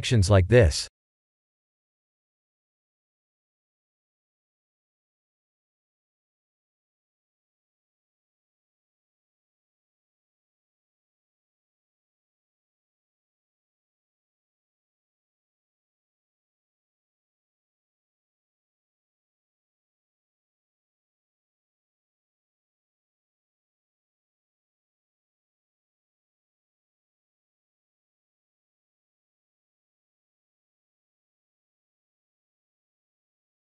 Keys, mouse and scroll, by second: 0.8 Tab, 2.9 click, 3.7 click, 5.3 click, 7.3 click, 8.1 click, 13.6 click, 16.2 click, 17.9 click, 19.1 Tab, 19.5-19.8 drag, 20.5 b, 22.7 3, 23.4 b.